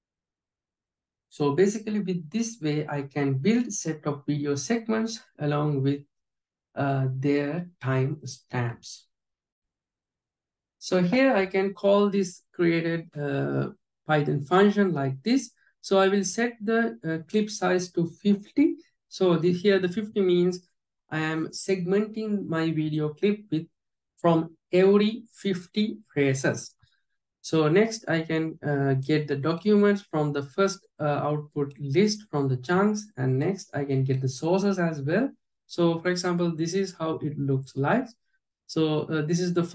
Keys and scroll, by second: 16.6 alt+j.